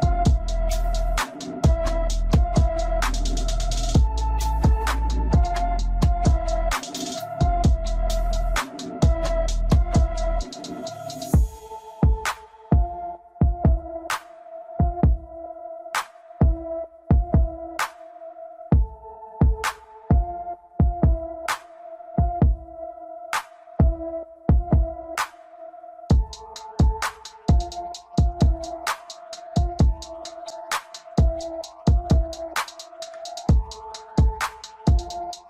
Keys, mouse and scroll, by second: 2.9 click, 3.6 scroll down 1, 5.2 click, 6.6 Tab, 7.4 click, 8.7-10.3 scroll up 3, 17.3-25.7 drag, 27.1-27.6 scroll down 4, 27.6 Tab, 29.5 click, 30.8-31.2 scroll down 2, 31.2-32.8 middle drag, 32.8-33.4 scroll up 2, 33.4 scroll up 1, 33.9 middle click, 34.7 click, 35.3-35.4 middle drag.